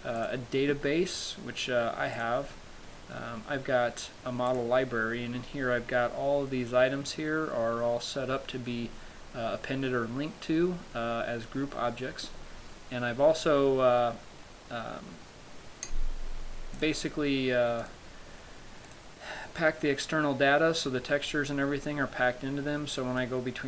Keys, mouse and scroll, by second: 17.2 click, 18.2 click, 23.5 middle click.